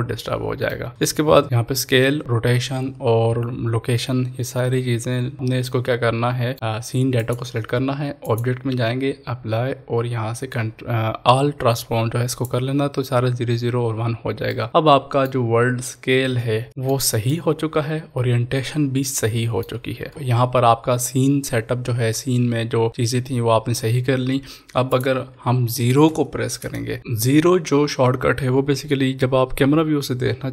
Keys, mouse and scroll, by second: 0.9 ctrl+s, 5.6-7.2 middle drag, 7.2 click, 12.2 click, 12.3 click, 14.7-15.4 middle drag, 15.6-16.4 scroll up 2, 16.4 scroll up 1, 16.9 shift+middle drag, 17.7-19.8 middle drag, 20.1 ctrl+s, 24.9 ctrl+s, 24.9 click.